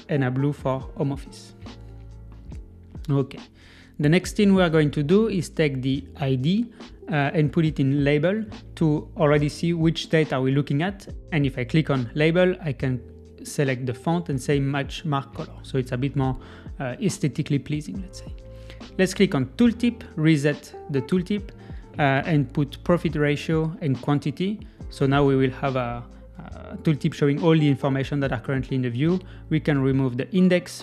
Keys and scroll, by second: 6.0 super+z.